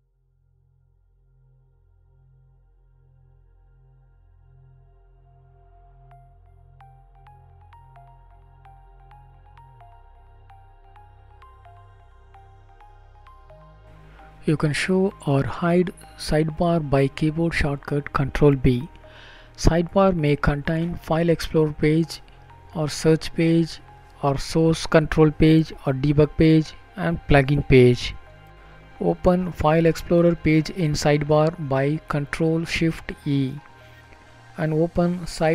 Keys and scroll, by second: 21.1 ctrl+b, 22.6 ctrl+b, 29.2 ctrl+shift+e, 30.7 ctrl+shift+e, 35.3 ctrl+shift+f.